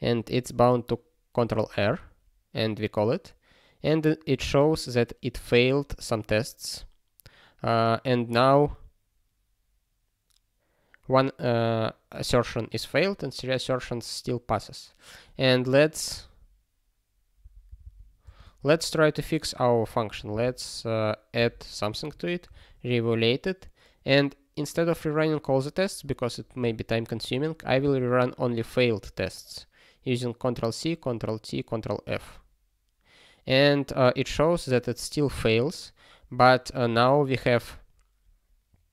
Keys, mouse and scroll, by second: 1.8 ctrl+r, 16.2 ctrl+a, 17.4 ctrl+e, 17.6 ctrl+b, 17.8 ctrl+b, 18.2 space, 18.6 ", 21.3 ctrl+e, 22.7 ctrl+e, 32.0 ctrl+f.